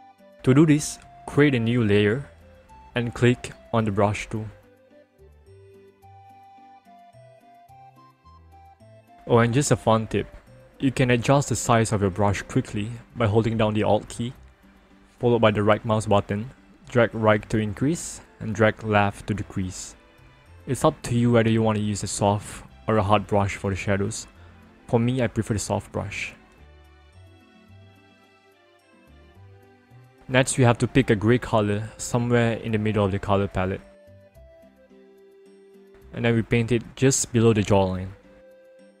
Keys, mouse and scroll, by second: 3.7 click, 7.2 click, 13.2 alt+right click, 19.6 right click, 22.4 click, 26.8 click, 30.0 click, 34.2 alt+right click, 36.9 click.